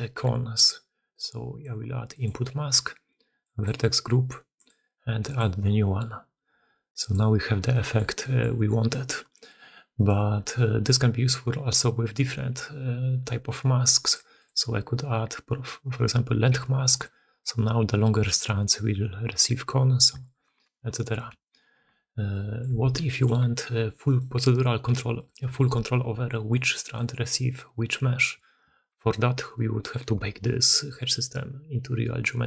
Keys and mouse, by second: 0.0-32.4 typing, 2.1-3.6 middle drag, 4.6-5.3 middle drag, 6.9 middle click, 7.6 middle drag, 8.1-8.5 drag, 8.8-9.4 drag, 14.0 click, 14.4-17.0 drag, 17.4-17.9 drag, 18.3 middle drag, 19.9 middle drag, 20.8 ctrl+z, 21.3 ctrl+z, 21.8-22.5 middle drag, 22.7 alt+a, 26.2 middle click, 27.5-28.2 drag, 29.6 ctrl+shift+h.